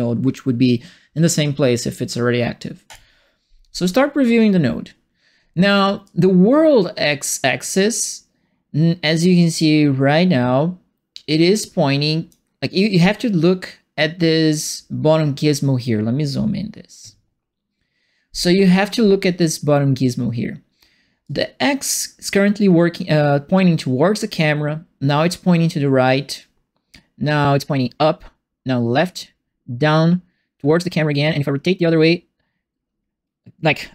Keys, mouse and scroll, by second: 2.8 click, 6.0-12.3 drag, 21.2-33.9 drag.